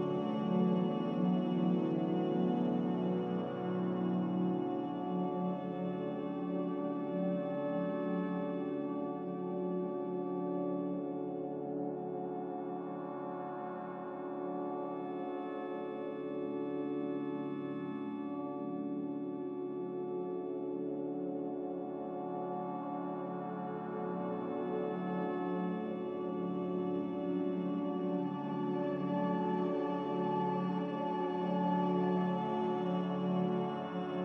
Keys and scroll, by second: 1.3 z, 2.2 z, 7.2 a, 9.5 n, 13.2 Escape, 13.3 Escape, 15.1 z, 18.7 b, 23.8 a.